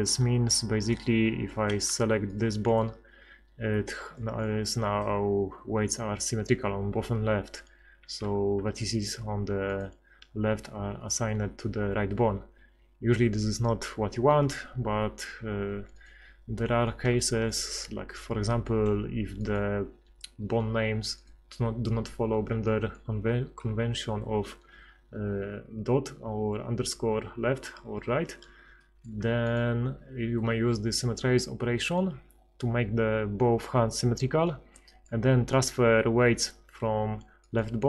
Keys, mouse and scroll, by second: 1.5 middle click, 2.3-4.1 right drag, 4.1-13.6 drag, 10.4 r, 16.0 click, 16.6 middle click, 16.7 click, 18.5 a, 20.4 r, 28.9 middle click, 34.9 middle click.